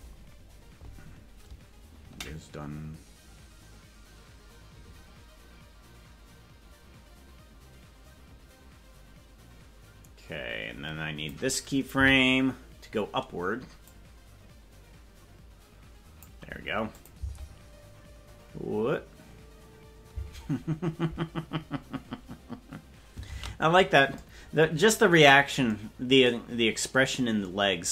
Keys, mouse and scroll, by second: 2.3-11.4 drag, 13.8 Left, 13.8-16.3 drag, 17.1 click, 17.5 space, 20.2 space, 26.9 ctrl+s.